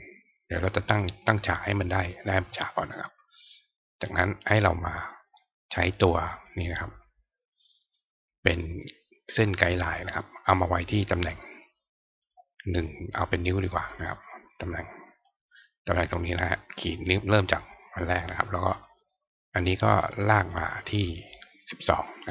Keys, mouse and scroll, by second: 0.0 click, 3.2 click, 4.0 click, 6.4-9.4 drag, 12.2 click, 13.5-15.2 drag, 19.5 click, 19.8 click, 19.9 click, 20.1 click, 20.3 click, 20.5 click, 22.0-22.3 drag.